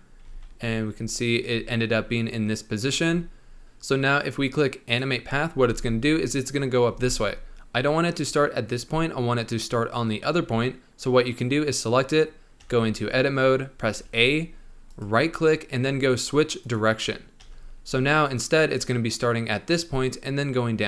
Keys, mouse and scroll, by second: 0.2 z, 0.7-1.3 scroll down 7, 1.3-2.9 scroll up 3, 2.9-3.6 scroll up 3, 3.6-4.8 shift+middle drag, 4.8 click, 5.6 space, 6.9 space, 11.2 click, 12.5 Tab, 13.9 a, 14.8-17.4 right drag, 17.4 Tab, 18.2-20.8 drag.